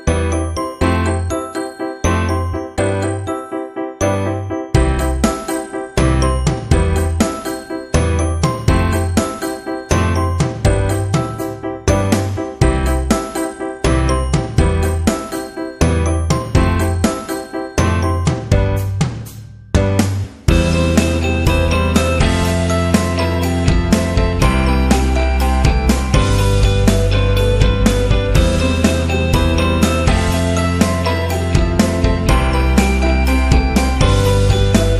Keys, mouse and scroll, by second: 0.0-1.8 typing, 3.4 click, 4.8 alt+shift+click, 6.6 click, 8.0 click, 8.5 click, 9.4 click, 11.2 click, 12.6 click, 14.5 alt+shift+click, 16.6 click, 19.8 ctrl+t, 21.7 click, 23.8 click, 24.5 click, 24.7 ctrl+a, 25.7 click, 26.6-27.6 typing, 29.3 click, 30.2 click, 32.0 click, 33.1 click.